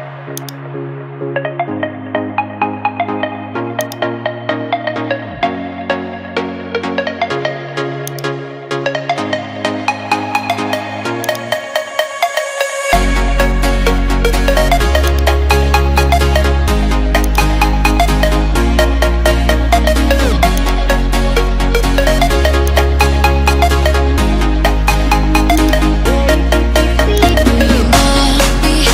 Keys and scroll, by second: 18.7 ctrl+z.